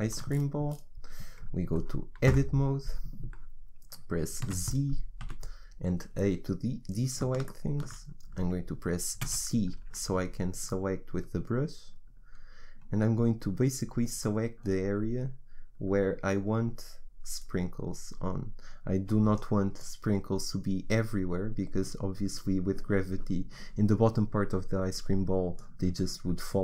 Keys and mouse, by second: 2.8 Tab, 4.5 z, 5.5 a, 9.4 c.